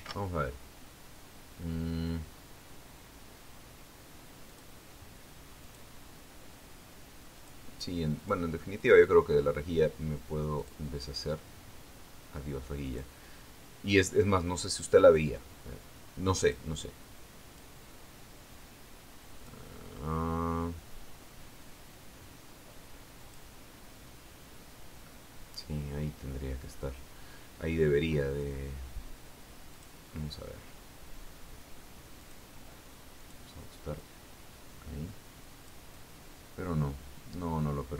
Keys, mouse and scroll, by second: 0.3 click, 1.4 ctrl+shift+d, 6.0 click, 7.1 click, 8.9 click, 9.7 click, 12.1 click, 14.4 click, 17.9 click, 18.7 click, 20.0-21.2 drag, 24.7 click, 31.2 click, 33.7 click, 34.7 click, 35.5-37.9 drag.